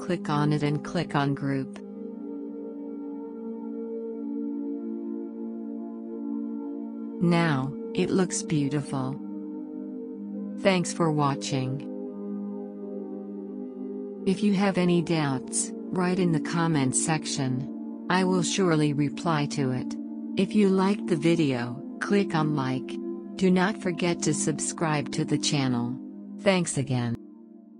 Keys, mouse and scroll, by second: 1.0 right click, 2.4 click, 6.0 ctrl+1.